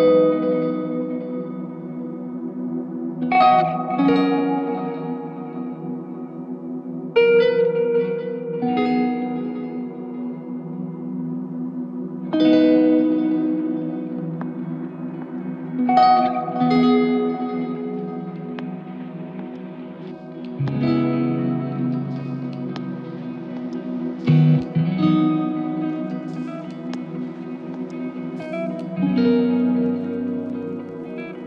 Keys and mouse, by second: 4.3 alt+click, 5.7 alt+s, 5.9 ctrl+alt+click, 8.0 double click, 8.9 alt+click, 9.8 double click, 11.3 alt+click, 13.0 double click, 14.5 alt+click, 15.5 double click, 18.0 alt+click, 20.3 double click, 22.1 alt+click, 23.2 double click, 24.4 alt+click, 26.2 double click, 27.3 f.